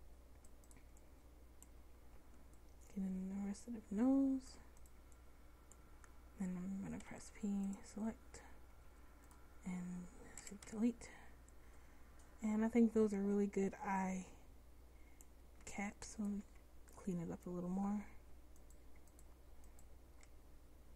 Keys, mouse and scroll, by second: 2.2 c, 7.1 p, 8.9 Tab, 10.5 Delete, 11.3 middle drag, 15.7 Tab, 16.5 Tab.